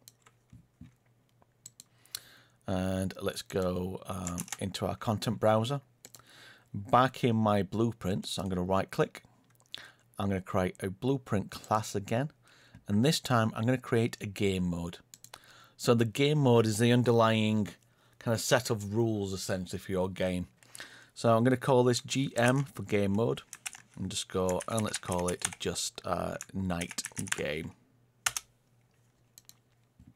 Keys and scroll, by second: 4.3 ctrl+space.